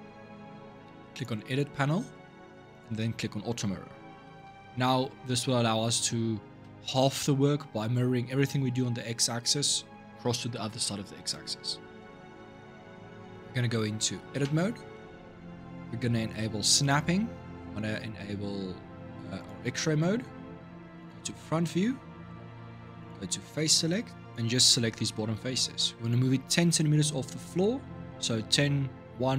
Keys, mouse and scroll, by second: 0.9 click, 2.5-4.0 drag, 4.0-7.1 middle drag, 12.6-14.2 middle drag, 14.2 Tab, 16.6 click, 19.1-20.8 drag, 21.4-22.8 scroll up 4, 22.8 click, 25.4 scroll up 2.